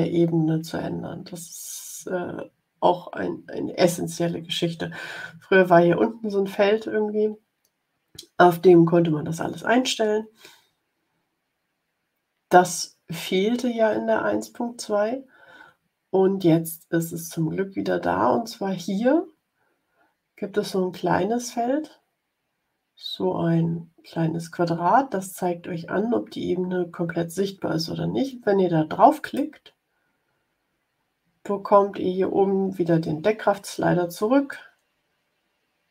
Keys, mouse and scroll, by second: 29.1 click, 34.4-35.9 drag.